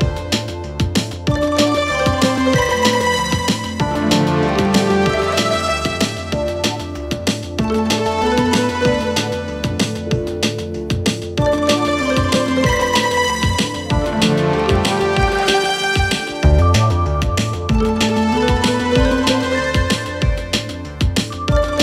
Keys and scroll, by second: 14.7 ctrl+k, 17.1 c.